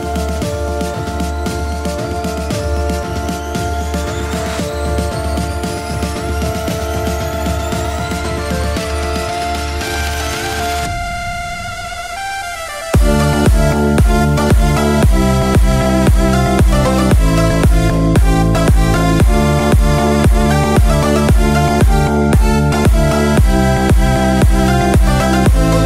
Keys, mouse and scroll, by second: 2.7-5.1 drag, 3.8 KP_4, 6.0-7.6 scroll down 5, 7.6 KP_1, 8.1-9.0 scroll down 3, 9.0 shift+middle click, 10.0-10.4 scroll up 2, 11.5 KP_3, 13.8 r, 16.4 click, 17.2-19.3 drag, 19.8-20.3 scroll down 3, 20.6 shift+middle click, 22.5 click.